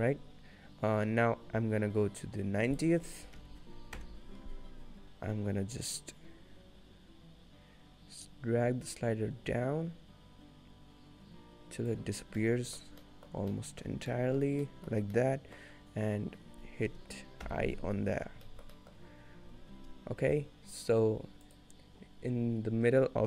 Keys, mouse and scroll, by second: 2.9 click, 5.3 click, 12.4 middle click, 12.9-13.6 scroll down 3, 13.1 middle click, 13.6 middle click, 14.0 scroll up 2, 14.3 middle click, 14.5 scroll down 1, 14.7 middle click, 15.2 middle click, 16.3 scroll up 1, 17.5 i, 18.2-18.5 scroll down 3, 18.5 shift+middle click, 18.8 middle click.